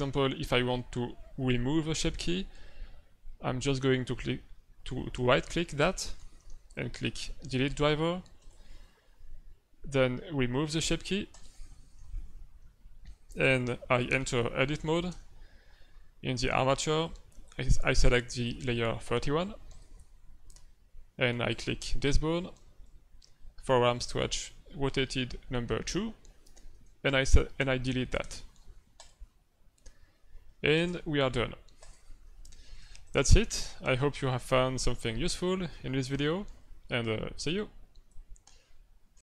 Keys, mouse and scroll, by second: 5.9 right click, 11.3 click, 13.2 right click, 15.1 Tab, 16.4 middle click, 16.7 z, 19.7 click, 21.5 right click, 26.7 middle click, 28.2 Delete, 30.7 ctrl+Tab, 32.7 z, 36.0 click.